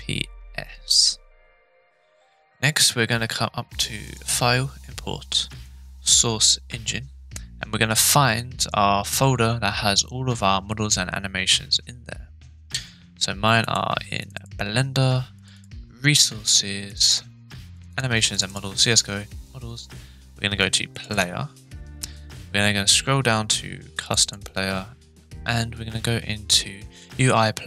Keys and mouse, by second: 4.2-4.5 drag, 5.7-7.3 drag.